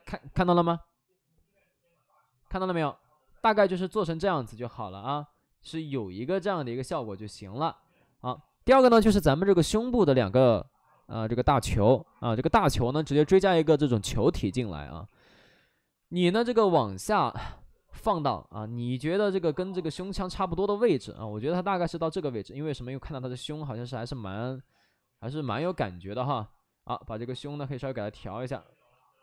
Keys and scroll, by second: 15.0 w, 21.3 ctrl+z, 25.4 3, 25.5 space, 26.1 3.